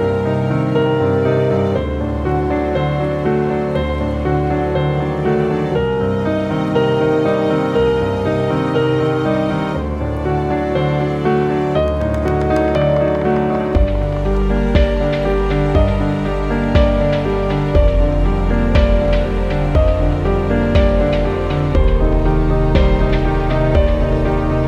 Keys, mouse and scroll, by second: 1.0 typing, 7.5 click, 8.8 typing, 12.6-16.9 typing, 21.8 click.